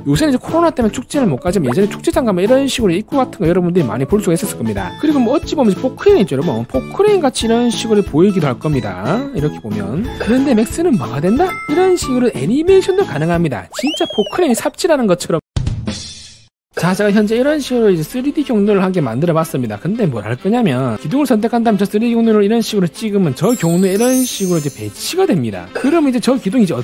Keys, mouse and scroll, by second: 2.5-4.1 alt+middle drag, 5.1 scroll up 1, 5.5 alt+middle click, 7.0-10.0 drag, 17.4-20.6 alt+middle drag, 20.8 middle click, 23.2 click, 26.1 click, 26.6 middle click.